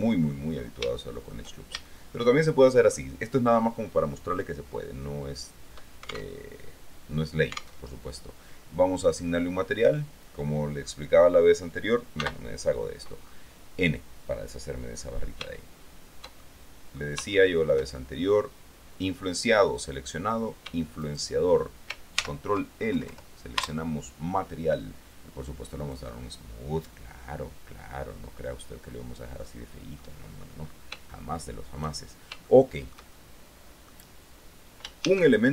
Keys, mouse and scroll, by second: 0.8-1.1 scroll up 3, 1.1-3.3 shift+middle drag, 6.5 alt+Tab, 8.0 alt+Tab, 12.4 n, 13.4-14.2 scroll down 2, 15.6-17.3 shift+middle drag, 17.5 shift+middle click, 18.4 click, 21.2 shift+right click, 22.4 ctrl+shift+l, 23.1 ctrl+Return, 26.0 click, 27.0-29.8 middle drag, 30.2 middle click, 30.8-31.1 scroll up 1, 31.3 shift+middle click, 32.6-34.2 shift+middle drag, 35.2 shift+a.